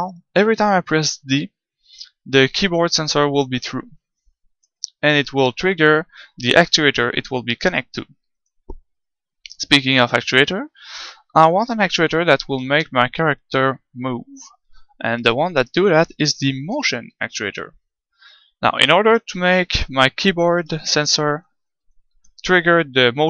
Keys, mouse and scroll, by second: 22.9-23.2 middle drag.